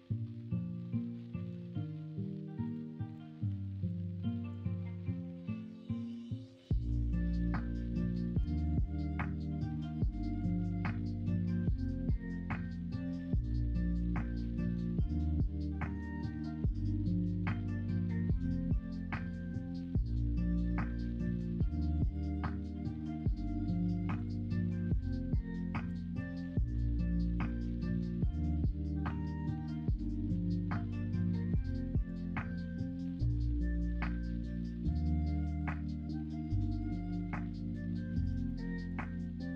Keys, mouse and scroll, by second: 7.0 middle click, 7.7 middle click, 8.7 alt+z, 9.4 middle click, 11.4 middle click, 12.1-13.3 middle drag, 13.8 middle click, 14.4 middle click, 14.8 middle click, 15.8 middle click, 17.0 shift+a, 20.8 middle click, 21.5 2, 21.8 3, 23.2 shift+d, 25.8 click, 26.0 middle click, 30.0-36.1 middle drag, 30.0 scroll up 1, 30.2-32.0 scroll down 1, 32.0-32.8 scroll down 1, 32.8 scroll down 1, 33.0-33.8 scroll up 1, 33.8-34.8 scroll down 1, 34.8-35.7 scroll down 1, 35.7-36.1 scroll down 1, 36.1 w, 37.0 ctrl+z, 38.2 g, 39.4 e.